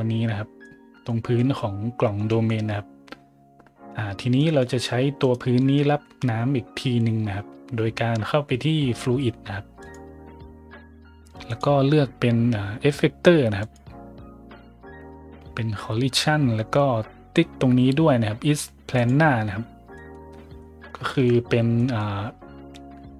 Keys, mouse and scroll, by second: 0.6-1.0 middle drag, 1.3 middle drag, 2.2 middle drag, 4.3 middle click, 5.1 right click, 5.5 middle click, 9.7 click, 11.4 click, 13.5 click, 18.9 click, 19.6 scroll up 1, 19.9 middle drag, 20.2 scroll up 1, 20.5 middle drag, 21.0 shift+middle drag, 21.3 middle click, 21.7 middle click.